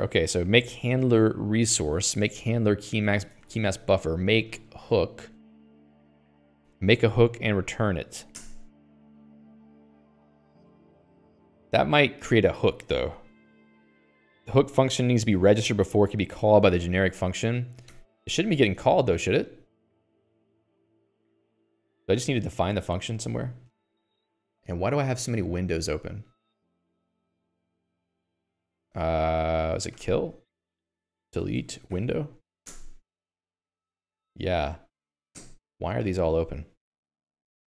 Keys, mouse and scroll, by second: 22.6 u, 23.0 Escape, 23.6 Escape, 23.7 Escape.